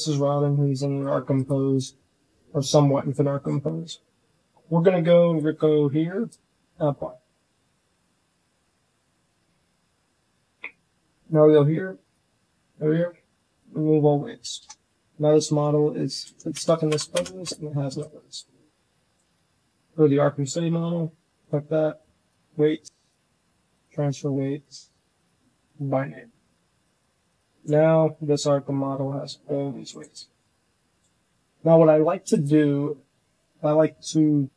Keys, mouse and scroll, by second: 0.9 click, 1.2 click, 1.7 click, 5.3-6.7 drag, 11.9-13.5 drag, 14.5 KP_Divide, 15.4 g, 16.1 Tab, 16.4 Tab, 16.8 Tab, 17.0 Tab, 17.3 click, 17.9 click, 19.1 z, 21.3-22.2 drag, 22.9-23.7 drag, 25.1-25.8 drag, 26.8-27.3 drag, 27.6 z, 27.9 click, 28.4 g, 30.1 shift+drag, 34.1 Tab.